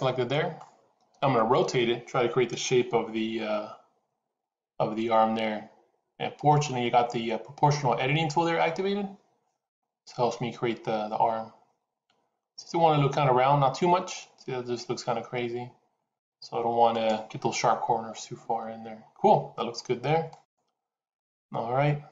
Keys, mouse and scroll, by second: 4.5 r.